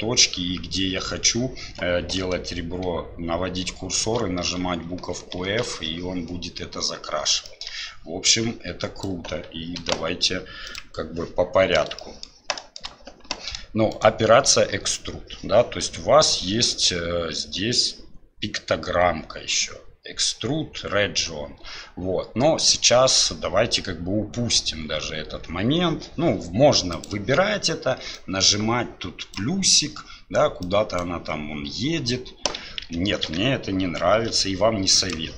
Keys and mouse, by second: 7.4 shift+click, 8.4 click, 9.8 Delete, 12.0 shift+middle click, 12.6 shift+middle click, 13.9 click, 26.9 click, 28.1-29.4 drag, 30.6 click, 32.8 ctrl+z, 35.0 click.